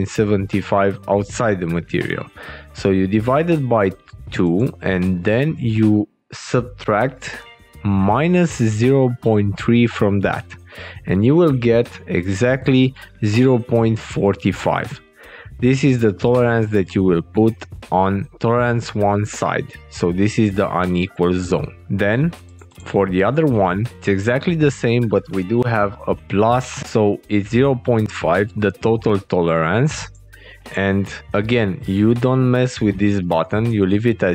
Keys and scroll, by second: 5.3 alt+Tab, 10.7 alt+Tab, 24.8 alt+Tab, 27.9 alt+Tab.